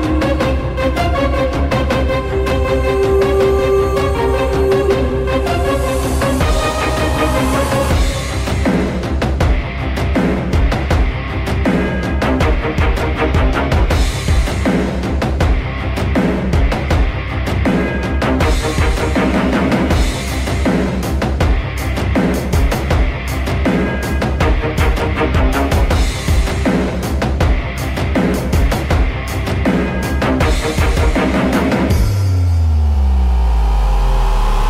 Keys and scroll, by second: 2.8 m, 6.0 super+e, 8.9 m, 9.5 m, 9.8 Return, 12.5 Return, 12.6 Right, 12.6 Left, 12.7 Right, 12.8 Return, 13.1 Left, 13.1 Down, 13.3 Down, 13.7 BackSpace, 13.9 BackSpace, 14.3 Down, 14.4 Return, 14.6 BackSpace, 14.8 Down, 15.2 Down, 15.3 Return, 15.6 Return, 16.2 BackSpace, 16.3 BackSpace, 16.6 Down, 16.6 Return, 26.3 F2, 26.6-28.7 typing, 29.8 typing, 29.8 ctrl+c, 30.0 alt+Tab, 30.2 alt+Tab, 30.8 ctrl+v, 30.8 Return.